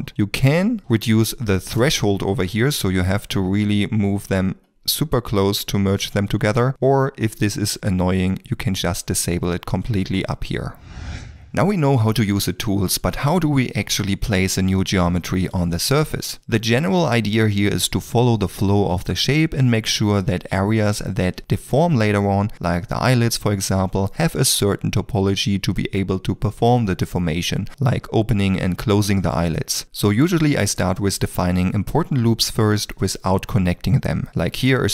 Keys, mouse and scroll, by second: 1.5 KP_0, 1.8 Return, 4.7 g, 11.9 d, 12.0 click, 12.4 click, 12.7 click, 13.1 d, 13.7 d, 13.8 click, 16.9 g, 17.4 ctrl+r, 17.9 g, 18.3 ctrl+r, 18.5 g, 20.4 ctrl+r, 20.4 g, 21.2 ctrl+r, 21.6 g, 22.8 ctrl+middle click, 22.9 shift+middle click, 23.0 a, 23.5 d, 23.7 click, 24.0 click, 24.3 click, 24.9 click, 25.3 click, 25.9 click, 26.6 click, 27.5 d, 27.6 click, 29.5 shift+middle click, 29.9 2, 30.2 d, 30.3 click, 31.2 click, 31.5 click, 32.1 d, 32.3 click, 33.0 click, 33.3 click, 33.6 click, 33.9 click, 34.2 click, 34.3 d, 34.5 click, 34.8 click, 34.8 d.